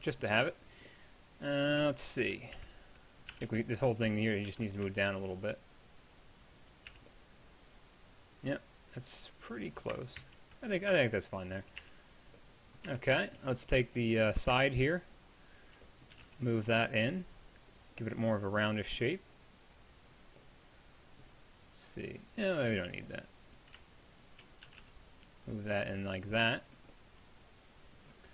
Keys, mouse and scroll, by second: 2.2 KP_1, 2.6 KP_3, 3.3 a, 3.5 b, 4.5 g, 6.9 z, 10.2 ctrl+z, 10.9 a, 11.8 Tab, 16.2 g, 23.1-24.7 drag, 24.7 g.